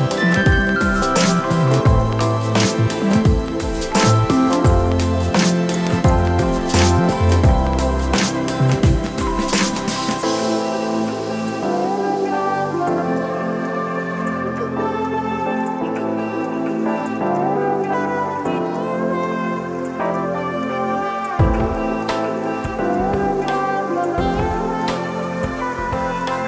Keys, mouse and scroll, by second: 1.3 click, 4.1 click, 4.7-5.6 right drag, 7.2-9.1 drag, 8.2 KP_5, 9.5 click, 13.8-14.7 right drag, 16.3-19.6 drag, 19.9-21.1 drag, 23.0 a, 24.7-26.4 right drag.